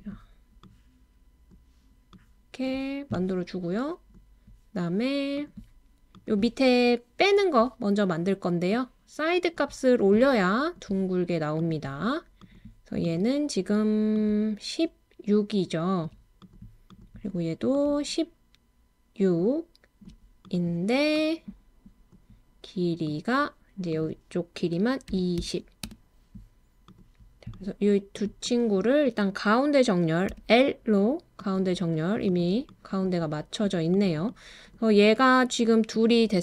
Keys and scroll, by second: 25.1 2, 25.4 0, 25.8 Return, 27.4-28.1 typing, 30.3 l.